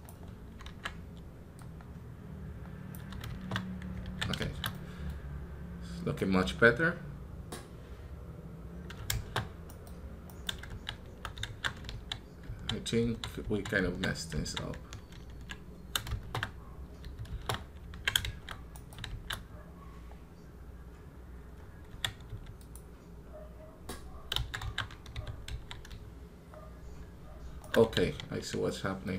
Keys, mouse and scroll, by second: 9.5 right click, 10.1 right click, 18.6 right click.